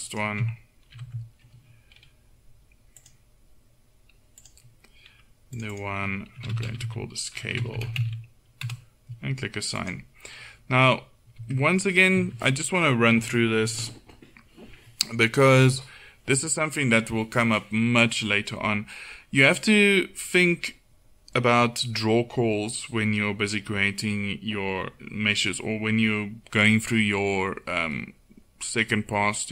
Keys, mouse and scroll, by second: 1.0 ctrl+l, 1.0-3.1 right drag, 3.1-4.3 drag, 7.7 BackSpace, 11.4 Tab, 12.2 Tab, 13.2 a, 13.7 a.